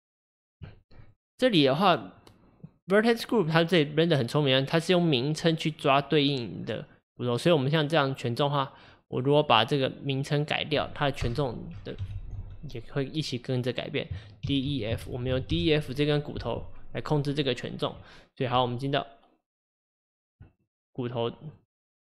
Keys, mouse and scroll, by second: 1.1 click, 9.1 click, 9.3-12.2 drag, 12.2 Left, 12.3 Left, 18.6 Tab, 20.7 click, 21.6 click, 22.0 click.